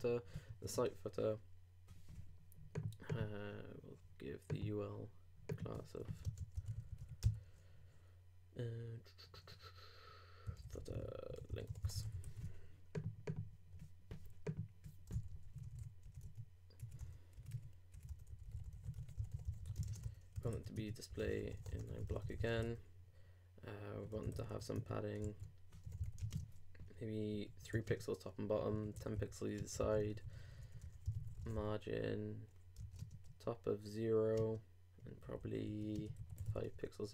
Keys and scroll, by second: 7.2 shift+', 12.1 super+s, 19.8 shift+space, 20.0 shift+Return, 25.2 super+Tab, 25.8 super+i, 26.2 shift+g, 26.3 shift+space, 27.3 shift+3, 33.0 shift+space, 36.7 super+;.